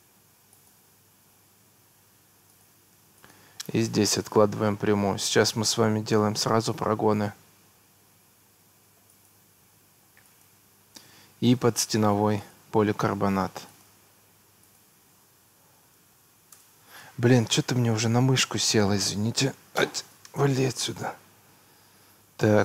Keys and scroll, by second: 1.0 Escape, 10.8 Escape, 15.8 2, 16.0 0, 16.6 Return, 21.6 Escape.